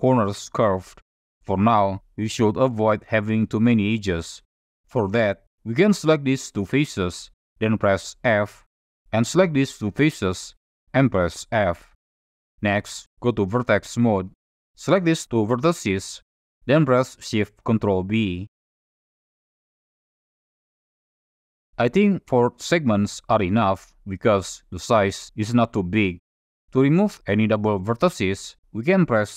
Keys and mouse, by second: 5.7 click, 6.1 shift+click, 8.1 f, 9.6 click, 10.1 shift+middle click, 11.6 f, 14.0 1, 14.7 click, 15.8 shift+click, 18.2 ctrl+shift+b, 22.1 click, 22.6 click, 23.4 click.